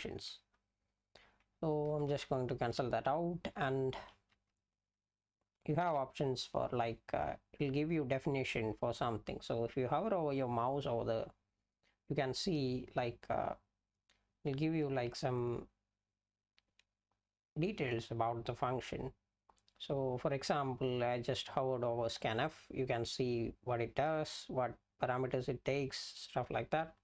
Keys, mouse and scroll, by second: 0.5-1.7 BackSpace, 1.9 BackSpace, 2.1 BackSpace, 2.2 BackSpace, 3.2-3.9 Down, 4.1 Down, 4.3 Down, 4.5 Down, 4.8 Down, 5.6 Right, 6.0 Up, 6.2 Right, 6.6 Right, 6.9 Right.